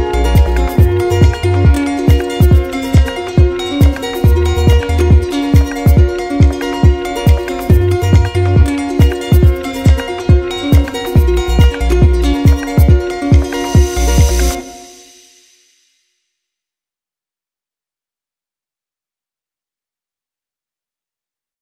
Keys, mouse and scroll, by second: 2.2 click, 3.6 click, 4.1 alt+click, 7.8 click, 8.7 click, 11.1 click, 13.3 click, 14.4 shift+click, 16.7 shift+click, 17.7 shift+click, 17.8-19.5 drag.